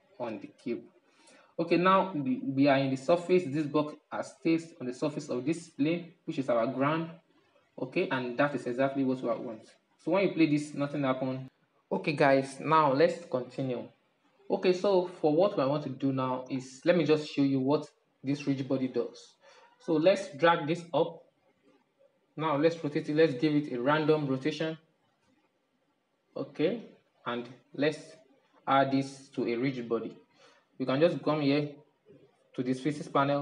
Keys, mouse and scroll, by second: 6.4-7.1 scroll down 5, 7.1-9.9 middle drag, 9.9-11.6 drag, 13.0-15.9 middle drag, 15.9-16.4 scroll up 1, 16.4-17.7 shift+middle drag, 17.7-18.4 scroll down 1, 18.4-19.9 middle drag, 19.9-21.0 drag, 21.0-22.2 middle drag, 22.2 r, 23.6-24.5 middle drag, 24.5 r, 25.7-28.8 middle drag, 31.0 click.